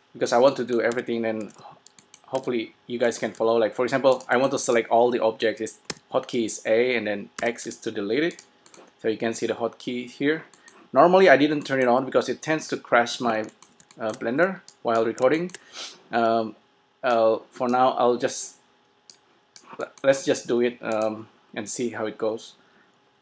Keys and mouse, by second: 0.6 middle click, 1.1 a, 1.6 f, 2.5 a, 3.6 a, 6.0 a, 7.6 x, 14.7-16.4 drag, 17.2-18.9 drag, 19.1 click, 19.7 click, 20.0-21.9 middle drag, 21.9 click.